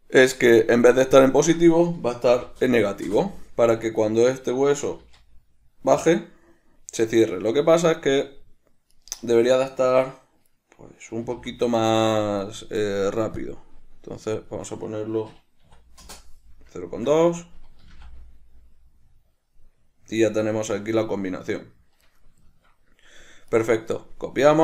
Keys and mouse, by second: 1.0-4.1 drag, 3.3 Return, 4.1 right click, 5.2 g, 9.3 right click, 11.5 g, 12.7 right click, 13.6-17.4 drag, 16.4 Return, 17.4 right click, 18.1 g, 22.4 right click, 22.8-23.8 shift+middle drag, 23.8 right click.